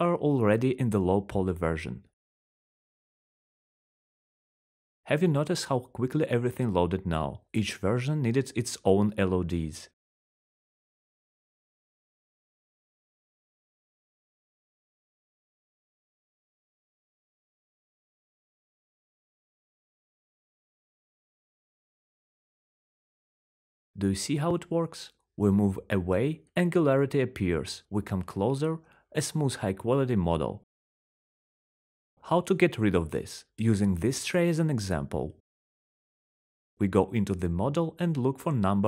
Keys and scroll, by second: 16.2-20.2 typing, 21.6 r, 22.8-33.6 typing, 31.2 Delete, 37.3 typing.